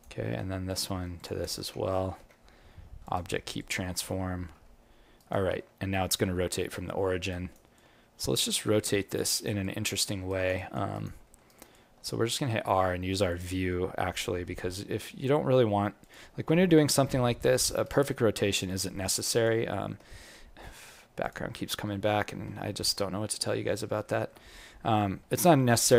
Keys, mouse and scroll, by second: 0.6 click, 1.1 click, 2.0 ctrl+p, 3.5 click, 4.5 g, 7.3 alt+right click, 7.7 alt+click, 9.2 alt+right click, 9.6 alt+click, 10.0 alt+middle click, 10.2 alt+right click, 10.5 alt+click, 10.9 alt+right click, 11.2 alt+middle click, 11.4 alt+right click, 11.7 alt+click, 12.3 r, 14.5 g, 17.0 scroll up 7, 17.1 alt+click, 17.8 alt+right click, 18.2-18.6 scroll down 5, 18.6 alt+click, 19.6 alt+middle click, 21.2 click, 22.5 scroll down 3, 22.6 alt+middle click, 23.1 scroll up 1, 23.9 scroll up 11, 24.0 alt+middle click, 24.4 scroll up 1, 25.1 scroll up 1, 25.3 alt+middle click, 25.8-25.9 scroll down 2.